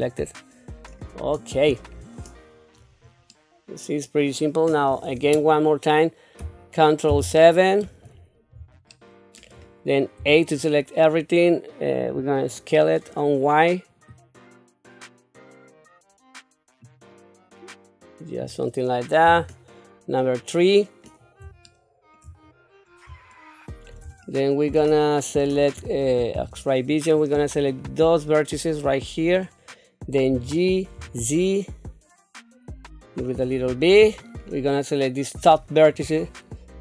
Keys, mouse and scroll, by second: 0.0 right click, 0.9 middle click, 1.9 scroll down 2, 2.4-2.8 scroll up 2, 2.8-3.2 scroll down 2, 3.3 middle click, 7.1 ctrl+KP_7, 8.9 shift+middle click, 10.2 a, 12.0 click, 14.1-18.4 drag, 19.2 KP_3, 21.6 shift+middle click, 22.4-23.0 scroll up 1, 23.3 shift+middle click, 24.3 shift+middle click, 26.3 q, 27.7-29.3 drag, 30.3 g, 34.0 middle click, 35.4 click.